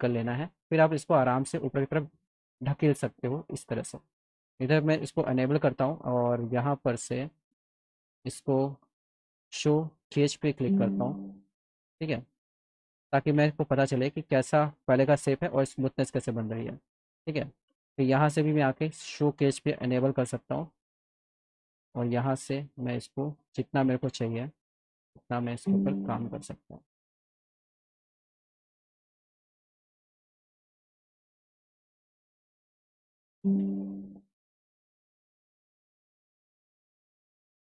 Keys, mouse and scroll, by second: 1.0 click, 1.4 middle click, 3.1 click, 4.9 click, 5.4 click, 8.4 click, 9.5 click, 13.4 alt+middle click, 17.2 click, 18.1 click, 19.9 click, 21.1 click, 22.7 click, 25.3 click, 32.7 click, 35.2-36.2 alt+middle drag, 36.5 middle click, 36.9 alt+middle click.